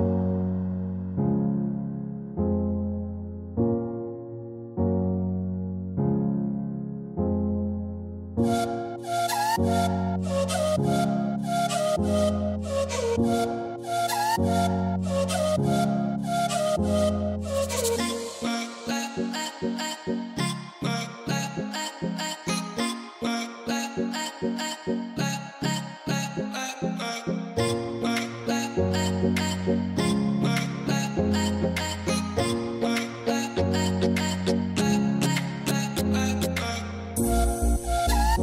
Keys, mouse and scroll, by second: 0.8-3.4 drag, 6.3 click, 7.0 click, 7.9 shift+a, 18.2-19.4 drag, 20.6 click, 22.8-32.7 drag, 32.7 o, 35.2 shift+d.